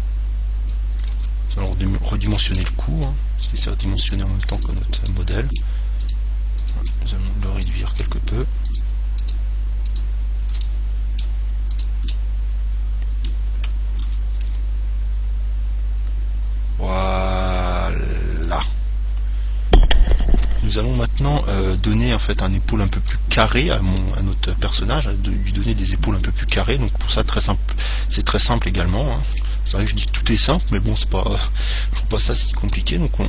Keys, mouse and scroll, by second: 0.6-2.5 middle drag, 1.4 Tab, 2.8 ctrl+Tab, 4.8-8.5 right drag, 5.3-6.9 middle drag, 7.9-9.6 middle drag, 8.9-11.8 right drag, 10.8-12.8 middle drag, 12.0 right click, 13.3 middle click, 14.0 s, 18.8 click, 23.3-25.0 middle drag, 26.0-27.9 middle drag, 30.0 ctrl+Tab.